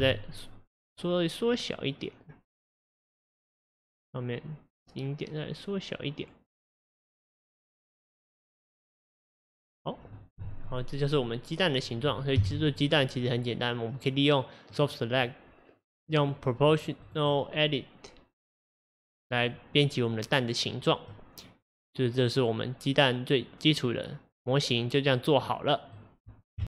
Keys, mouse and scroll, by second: 0.1 s, 10.2 click, 10.7-12.4 middle drag, 12.4 KP_1, 14.7 click, 16.2 click, 16.7 click, 17.0 click, 17.3-18.4 right drag, 18.4 drag, 21.2-24.2 middle drag.